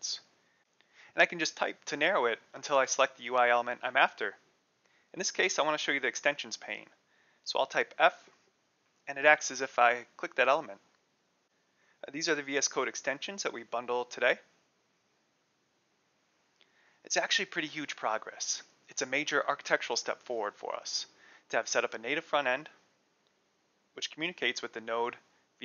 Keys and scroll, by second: 8.0 f.